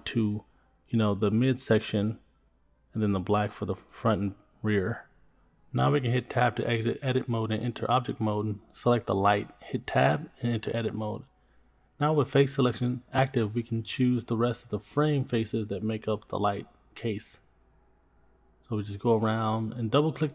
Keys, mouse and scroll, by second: 2.9 click, 3.0-6.4 drag, 6.6 middle click, 7.5 Tab, 8.6 click, 10.1 Tab, 12.6 shift+middle click, 13.3-13.8 scroll up 3, 14.0 shift+middle click, 16.5 shift+click, 16.6 shift+click, 17.5 shift+click, 17.6 shift+click, 17.9 middle click, 18.7 shift+click, 18.7 shift+click, 19.4 scroll up 1, 19.6 shift+middle click.